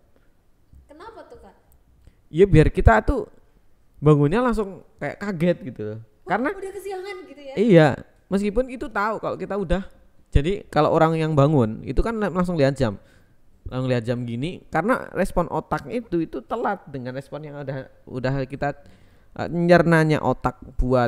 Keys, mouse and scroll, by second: 1.2 click, 2.1 Tab, 2.3 Tab, 3.0 ctrl+r, 4.2 click, 4.8 alt+z, 6.2 ctrl+r, 8.5 k, 11.3 click, 12.0 g, 12.3 z, 13.4 click, 14.0 ctrl+r, 15.0 click, 15.2 Tab, 20.2 Tab, 20.4 Tab.